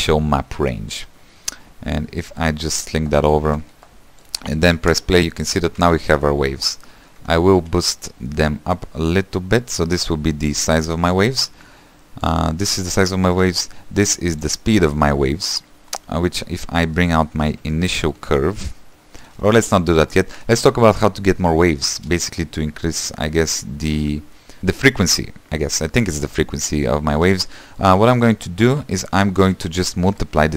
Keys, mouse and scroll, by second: 2.5 click, 5.0 space, 5.8 =, 6.1-8.0 middle drag, 8.0-9.0 scroll up 5, 9.0-12.7 shift+drag, 12.7-14.2 shift+middle drag, 14.2 click, 15.7-16.2 scroll down 4, 16.7-17.2 scroll down 3, 17.2-19.4 shift+middle drag, 19.4 space, 22.1 space.